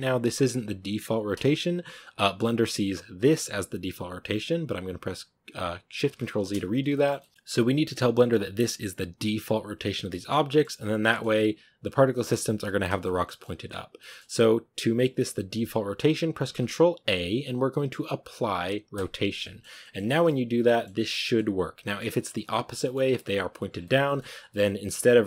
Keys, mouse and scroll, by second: 1.3-1.8 scroll down 1, 1.8-3.0 scroll up 1, 3.1 ctrl+z, 6.2 ctrl+shift+z, 6.8-9.0 shift+middle drag, 9.0-10.1 scroll down 1, 10.1-10.7 shift+middle drag, 10.7-11.5 scroll up 2, 10.9 shift+middle drag, 11.8 scroll down 1, 12.0-13.4 shift+middle drag, 13.4 scroll up 1, 13.9-18.9 shift+middle drag, 18.9 ctrl+a, 19.3-20.2 shift+middle drag, 20.2 scroll up 2, 20.5-21.8 middle drag, 21.8-22.7 scroll down 4, 22.7-23.6 middle drag, 23.6 scroll down 1, 23.7-24.2 shift+middle drag, 24.2 scroll up 1, 24.4-25.1 middle drag, 25.1 r.